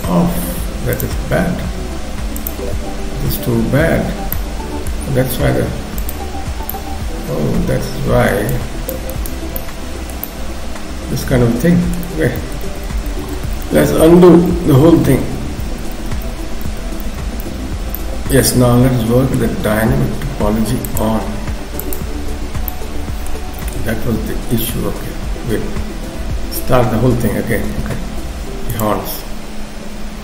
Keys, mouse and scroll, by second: 2.4 click, 4.3 middle click, 5.1 scroll up 1, 6.0 shift+click, 6.7 middle click, 8.5 shift+click, 9.1 shift+click, 9.6 shift+middle click, 10.3 middle click, 12.2 ctrl+z, 12.5 ctrl+z, 12.7 ctrl+z, 12.9 ctrl+z, 13.1 ctrl+z, 13.3 ctrl+z, 13.7 ctrl+z, 13.9 ctrl+z, 15.7 ctrl+z, 16.7 ctrl+z, 17.1 ctrl+z, 17.9 middle click, 20.9 click, 22.7 middle click, 23.6 KP_3, 26.1 k, 27.7 f.